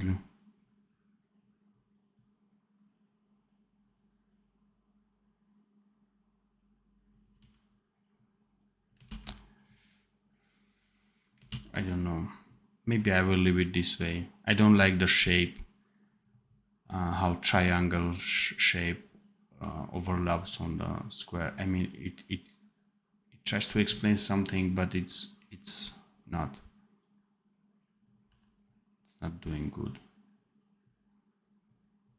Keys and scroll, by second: 7.3 x, 8.9 ctrl+z, 11.4 ctrl+z, 28.1 v.